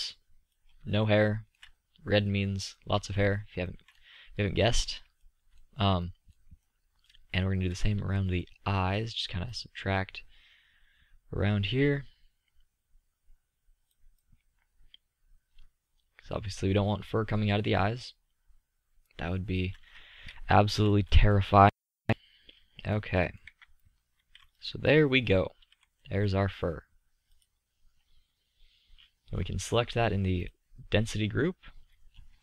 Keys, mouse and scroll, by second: 4.7-5.9 middle drag, 6.0-6.5 middle drag, 7.9 z, 9.7-11.4 drag, 20.0-20.7 middle drag, 25.5 z, 32.2-32.4 middle drag.